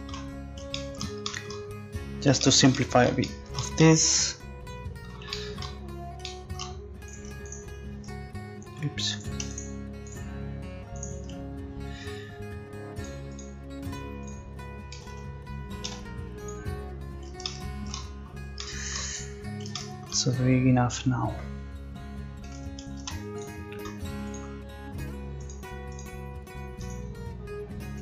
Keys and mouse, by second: 1.3-2.7 middle drag, 7.1-13.0 right drag, 13.0-14.9 drag, 14.9 a, 15.1 a, 15.9 u, 23.0 ctrl+s.